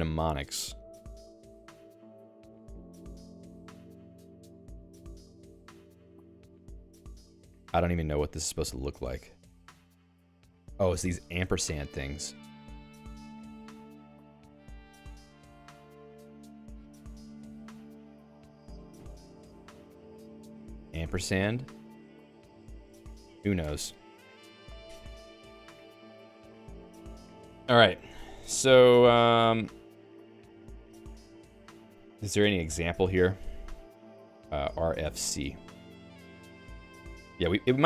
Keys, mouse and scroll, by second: 16.5 BackSpace, 17.4 c, 20.4 BackSpace, 21.7 &, 23.0 ctrl+r, 23.6 Escape, 28.1 d.